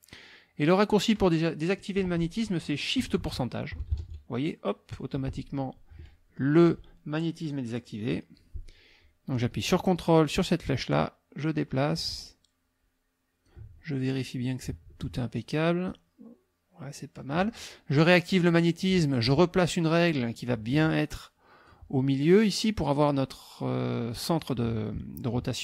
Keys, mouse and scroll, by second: 10.6-14.0 ctrl+drag, 15.9-17.5 ctrl+drag, 18.4 click, 19.9-21.8 drag.